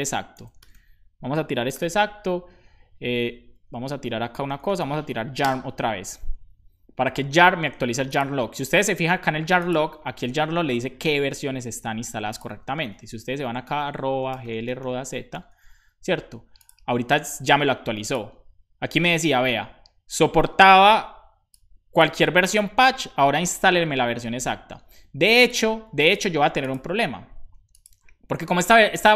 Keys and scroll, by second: 0.6 BackSpace, 0.7 super+s, 1.8 super+j, 3.3 ctrl+c, 4.2-5.2 typing, 5.4 Return, 13.6-15.4 typing, 24.5 Escape.